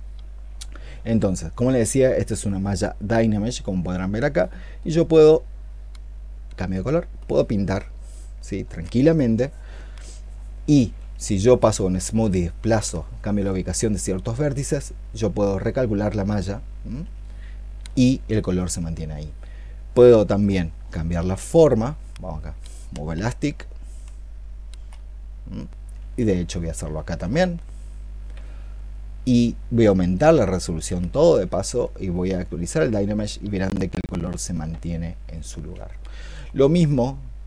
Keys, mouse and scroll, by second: 11.2 shift+click, 15.8 ctrl+click, 23.0-24.6 i, 24.8 i, 26.2 alt+click.